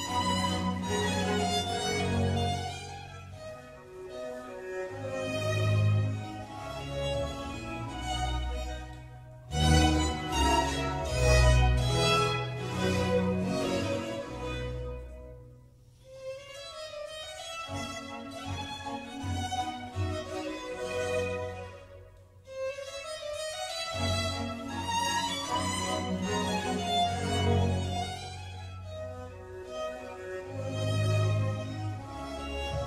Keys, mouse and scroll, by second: 0.0 scroll down 1, 0.2-1.6 middle drag, 1.6 3, 1.9 middle click, 2.6 click, 3.0-4.3 middle drag, 4.3 e, 11.2 middle click, 12.0 e, 23.7 scroll down 1, 24.0-26.7 middle drag, 26.7 click, 27.8 ctrl+r, 32.3-32.8 scroll up 1.